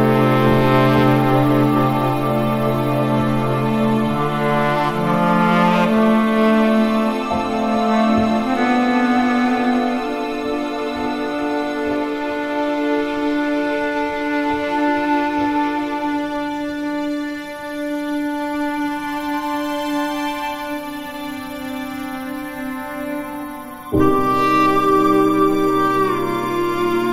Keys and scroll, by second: 7.3 s, 7.8 s, 8.2 s, 9.5 e, 12.3 alt+s, 12.9 space, 15.3 v, 18.2 i, 19.0 BackSpace, 19.6 super+d, 19.7 super+0, 20.9 super++, 21.0 super+space, 23.2 s, 24.9 e, 25.5 super+0, 25.6 Tab, 26.7 super++, 26.8 super+space.